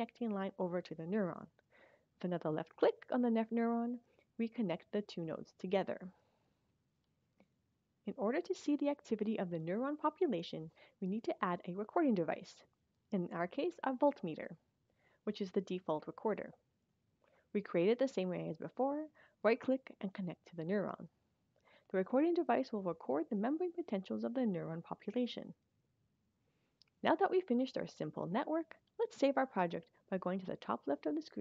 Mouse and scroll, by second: 3.2 click, 14.0 right click, 16.2 click, 18.2 click, 20.5 click.